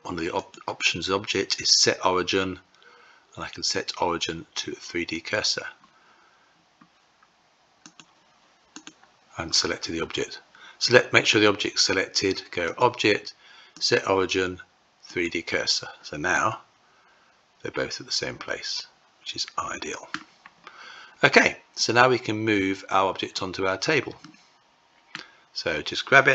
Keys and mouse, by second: 7.4-8.1 drag, 8.1 Tab, 8.2 click, 12.1-14.8 drag, 15.8-19.6 middle drag, 23.7-24.6 middle drag, 26.0 g.